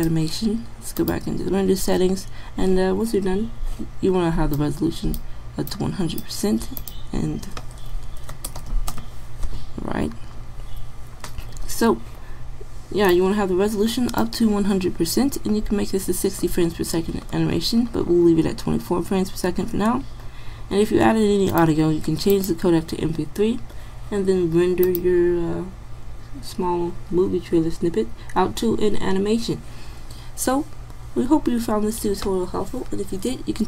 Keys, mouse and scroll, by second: 1.0-2.7 drag, 15.1-21.5 middle drag, 21.5-23.0 drag, 23.5-24.9 middle drag.